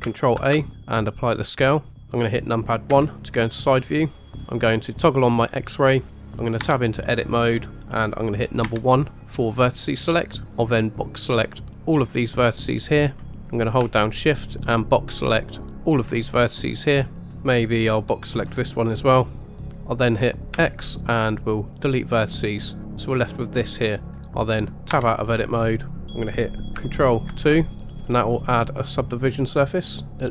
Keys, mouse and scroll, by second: 0.3 ctrl+a, 1.9 middle click, 1.9 KP_1, 2.9 KP_1, 5.0 click, 7.3 Tab, 8.6 1, 10.7-13.1 drag, 14.3-15.9 shift+drag, 17.3 scroll up 1, 17.4 shift+click, 18.0 shift+click, 20.5 x, 22.8-24.0 middle drag, 24.9 Tab, 27.3 ctrl+2, 28.7 click.